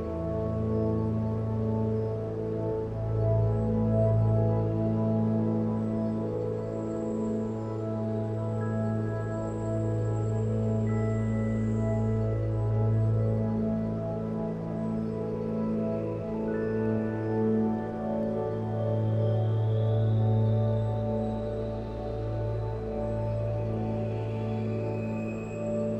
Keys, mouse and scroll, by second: 22.8 g, 24.9 h.